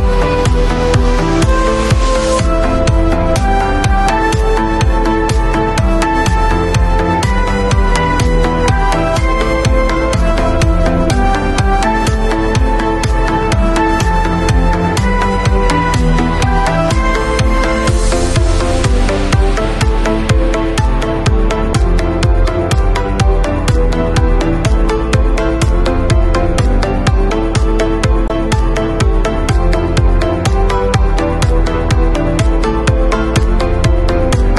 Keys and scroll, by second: 2.1 super+t, 24.5 super+t, 25.1 shift+super+t, 30.3 b, 34.1 [.